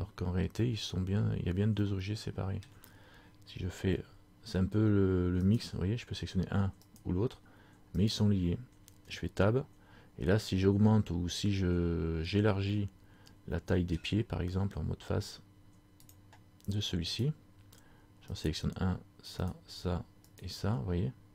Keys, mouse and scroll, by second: 0.2-0.8 scroll up 1, 1.6 scroll up 4, 1.9 middle click, 2.8 scroll down 1, 4.0 Tab, 5.6 right click, 9.2 Tab, 12.8 middle click, 14.1-14.7 scroll down 1, 16.2 click, 17.3 right click, 18.5 shift+right click, 19.5 right click.